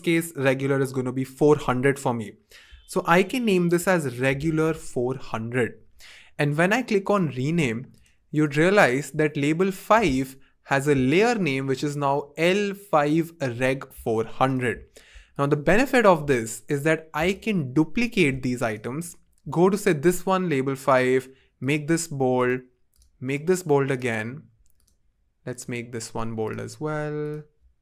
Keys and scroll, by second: 3.7-5.1 typing.